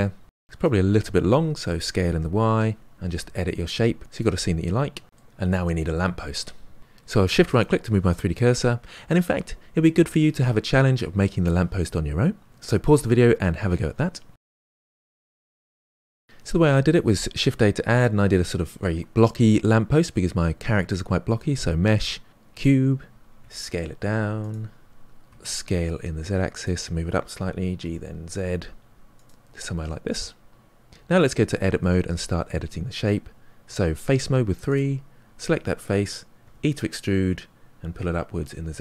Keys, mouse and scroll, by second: 0.4-0.8 drag, 0.8 s, 1.9 middle click, 2.3 click, 2.6 g, 4.2 s, 4.8-5.6 middle drag, 17.3 shift+a, 23.3 s, 27.2 g, 29.6-31.0 middle drag, 31.0 Tab, 31.5 shift+middle click, 32.0-33.6 scroll up 3, 33.6 3, 34.6 click, 36.4 e.